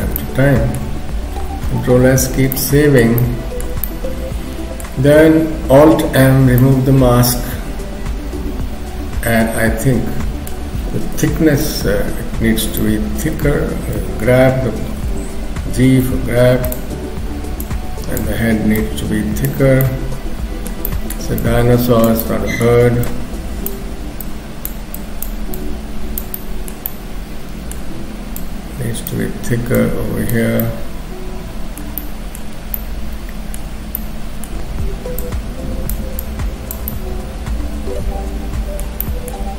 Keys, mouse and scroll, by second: 0.2 middle click, 1.0-1.5 scroll down 1, 1.9 ctrl+s, 3.0 middle click, 3.9 middle click, 6.1 alt+m, 6.6 middle click, 11.2 KP_7, 12.3-12.7 scroll up 1, 12.8 shift+middle click, 14.0 g, 15.0 g, 16.0 f, 17.6 click, 18.8 click, 19.8 middle click, 20.9 middle click, 21.4 click, 22.2 middle click, 23.1 click, 24.2 click, 25.5 click, 26.3 middle click, 26.9 middle click, 28.4 click, 29.8 click, 30.6 middle click, 32.0 middle click, 32.7 middle click, 35.2 click, 36.2 click, 36.9 middle click.